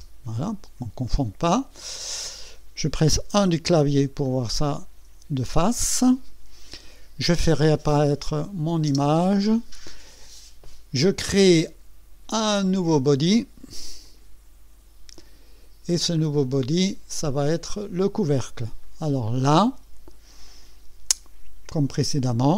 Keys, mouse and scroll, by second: 0.0-0.1 typing, 2.0 click, 3.3 KP_1, 4.2-5.0 right drag, 8.2 click, 8.9 space, 14.0 click, 15.2-16.2 scroll down 4, 16.2 scroll up 2, 16.4-16.7 scroll down 2, 16.7 scroll up 2, 17.2-18.0 right drag, 18.8-19.5 right drag, 19.6-20.0 scroll up 4, 20.5 right click.